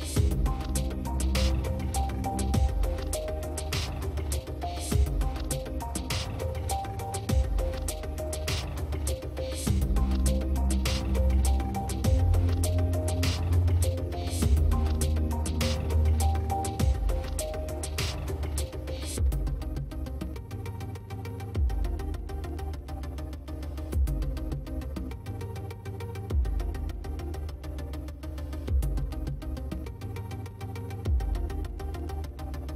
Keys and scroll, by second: 31.1 space.